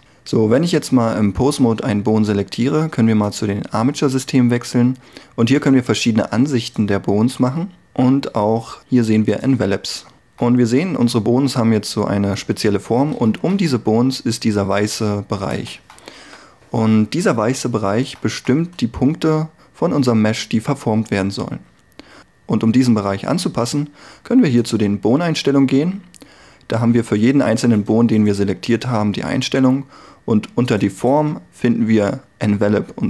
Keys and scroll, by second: 16.4 1.